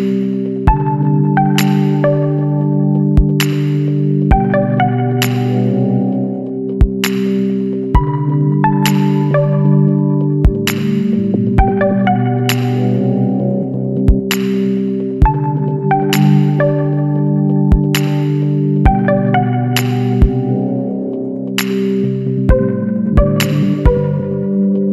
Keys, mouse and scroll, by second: 0.0 click, 1.0 KP_9, 2.5 click, 4.8-5.7 drag, 6.3-8.0 drag, 8.3 scroll down 1, 9.1 scroll up 1, 9.8 scroll up 1, 11.9 click, 13.6 click, 16.9 click, 18.8-19.2 scroll down 1, 19.4-20.1 scroll up 2, 21.4 Escape, 22.2 click, 24.0 click.